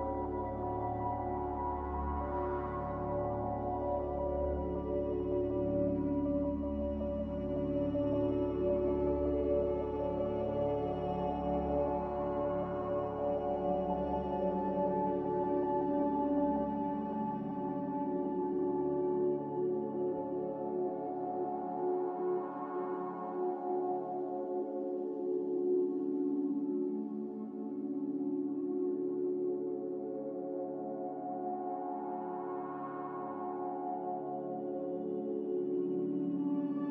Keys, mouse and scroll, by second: 2.8 m, 4.0 b, 4.7 Delete, 5.3 m, 9.2 ctrl+b, 15.4 a, 31.4 ctrl+c, 31.6 ctrl+v, 32.8 a, 33.8 ctrl+c, 33.9 ctrl+v.